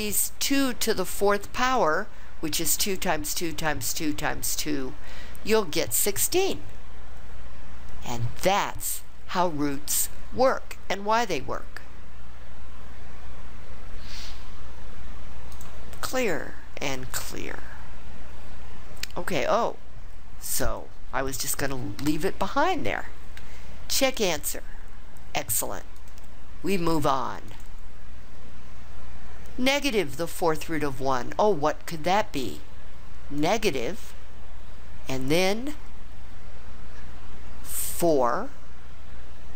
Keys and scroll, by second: 38.0 4.